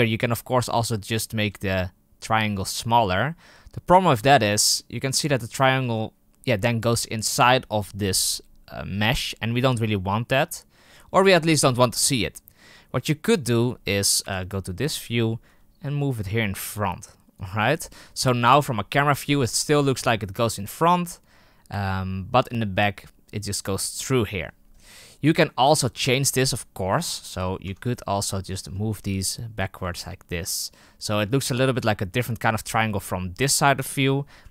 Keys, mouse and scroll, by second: 1.3 s, 4.1 z, 12.2-14.1 middle drag, 14.1 KP_3, 14.9-15.4 scroll up 4, 15.4 g, 18.4 KP_0, 23.7-24.5 middle drag, 24.5-26.0 scroll up 4, 26.7 KP_3, 27.5 Tab, 27.8 right click, 28.4-29.7 shift+right drag, 29.7 g, 34.3 KP_1.